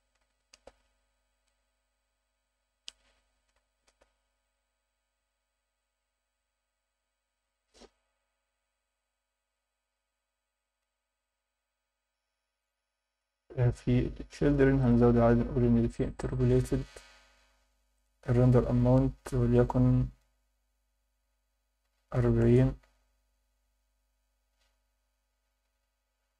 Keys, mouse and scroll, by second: 2.4-4.0 drag, 7.6-8.5 scroll down 4, 14.8 click, 16.5-22.5 drag, 25.0-26.0 scroll down 3.